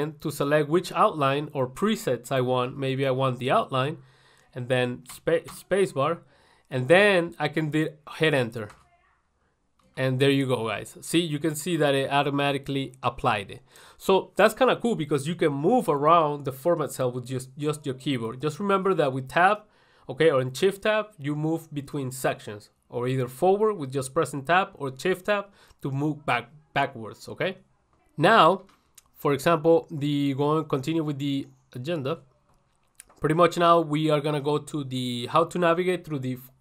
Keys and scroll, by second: 8.9 ctrl+1, 12.0 ctrl+1, 12.6 ctrl+1, 16.3 1.